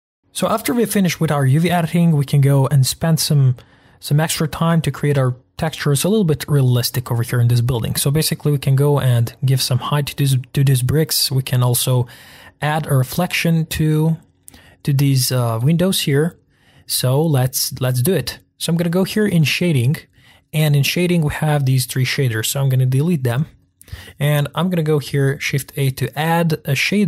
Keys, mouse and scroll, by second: 0.2-1.0 scroll down 1, 8.0-9.1 scroll up 2, 9.1-12.1 middle drag, 12.1-13.0 scroll down 1, 13.0-13.3 scroll down 1, 13.3-16.8 middle drag, 18.2 scroll down 1, 19.7-20.9 drag, 23.3 Delete, 23.6-27.0 drag.